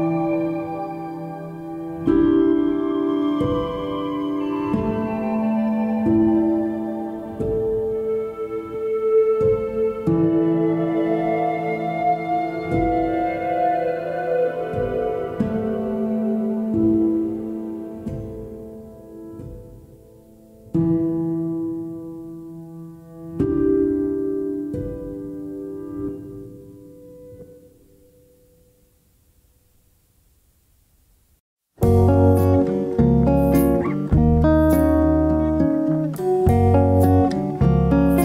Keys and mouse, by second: 8.7-9.3 drag, 9.7 g, 12.3 alt+z, 12.8 click, 13.2 g, 16.4 click, 22.2 click, 24.8 click, 34.5 Tab, 35.1 middle click, 35.4-35.8 middle drag.